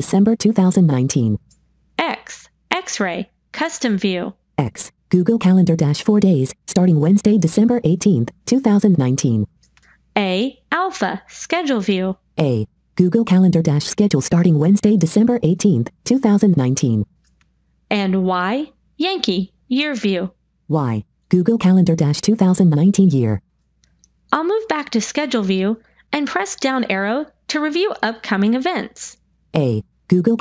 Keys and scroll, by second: 1.8 x, 10.1 a, 18.1 y, 25.7 Down.